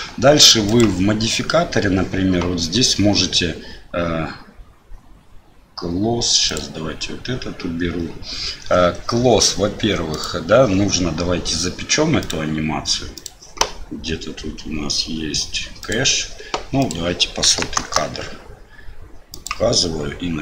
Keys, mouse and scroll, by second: 12.2-13.3 drag, 15.8 click, 16.8-19.5 drag, 17.8 KP_0.